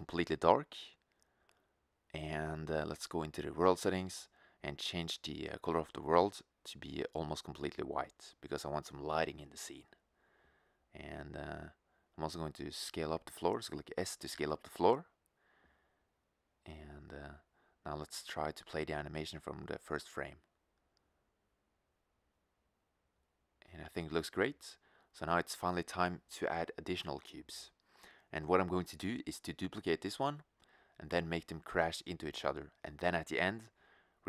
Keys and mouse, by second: 3.4-5.8 drag, 11.3 shift+z, 12.2 s, 18.2-23.3 drag, 24.1-24.7 drag, 24.7 shift+z.